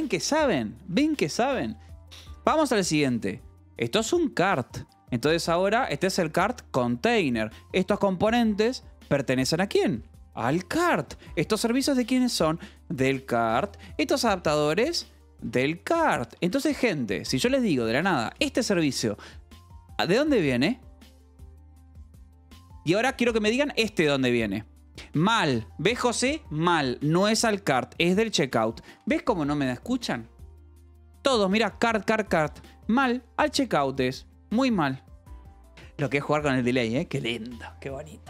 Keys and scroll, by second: 1.8 j, 3.3 shift+v, 4.8 Escape, 5.1 j, 6.0 shift+v, 7.0 Escape, 7.7-9.7 typing, 9.7 Escape, 10.8 Escape, 10.8 j, 11.9 j, 12.3 Escape, 12.9 k, 13.4 Escape, 13.9 j, 15.0 Escape, 15.3 k, 16.4 Escape, 17.3 j, 18.7 shift+v, 21.8 Escape, 22.3 j, 23.3 k, 24.8 Escape, 28.5 k, 29.3 shift+v, 32.4 Escape, 33.9 shift+v, 35.5 Escape.